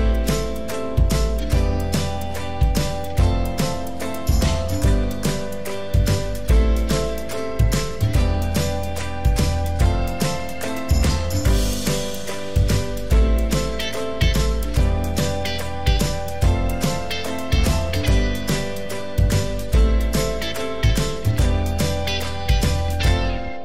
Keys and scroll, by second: 0.9 ↻, 2.2 ctrl+z, 12.9 ctrl+d.